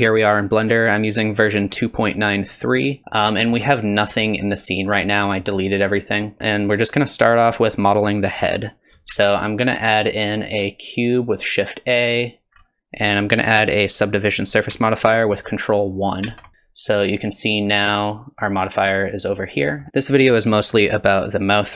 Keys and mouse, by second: 3.1 middle click, 5.2 middle click, 9.1 shift+a, 16.2 ctrl+1, 17.6 click, 19.6 middle click, 20.1 middle click.